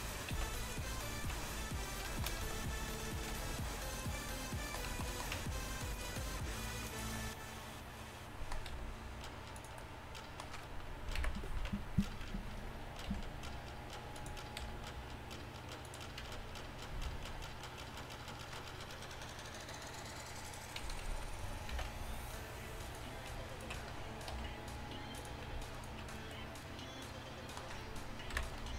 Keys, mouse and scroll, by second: 0.1-1.5 right drag, 0.4 x, 1.3 z, 2.5 a, 3.4 g, 5.4 Tab, 6.9-7.9 drag, 8.8 g, 11.2 KP_1, 11.7 Tab, 12.3 Tab, 13.1 r, 14.6 g, 16.3 Tab, 17.4 e, 20.9 a, 21.1 a, 21.8 ctrl+n, 22.3 middle click, 22.9-24.4 right drag, 24.4 r, 25.8-27.2 middle drag, 27.4 middle click, 28.4 KP_1.